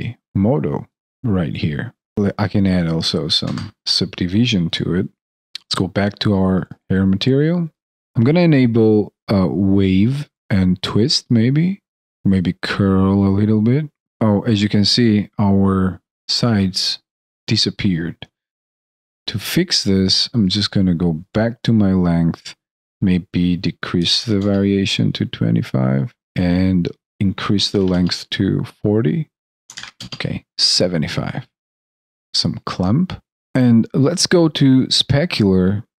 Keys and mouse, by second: 2.1 shift+c, 14.1 alt+click, 33.5 ctrl+z.